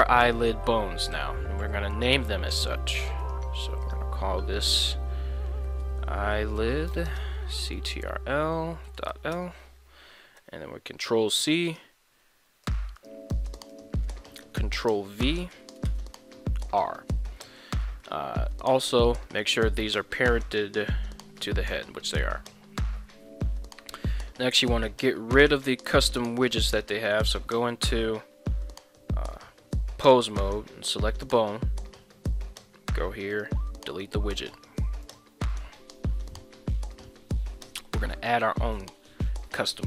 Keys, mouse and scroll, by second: 0.2 middle click, 3.8-10.8 drag, 10.3 ctrl+c, 13.8-16.7 ctrl+drag, 17.3 middle click, 17.8 middle click, 18.5 middle click, 20.5 ctrl+p, 22.2 Tab, 25.9 ctrl+Tab, 26.7 right click, 33.3 click, 34.7 right click, 37.0 click, 38.8 KP_1.